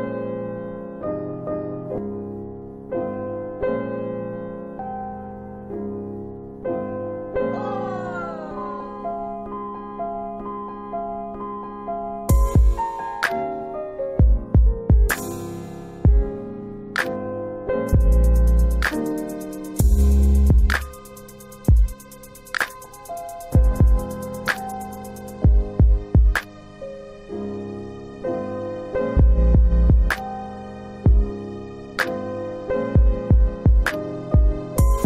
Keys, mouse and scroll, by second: 4.7 middle click, 8.5 double click, 12.5 click, 12.7 double click, 13.9 double click, 18.4 click, 21.2 click, 28.4 click, 29.9 click, 31.0 double click, 34.4 click.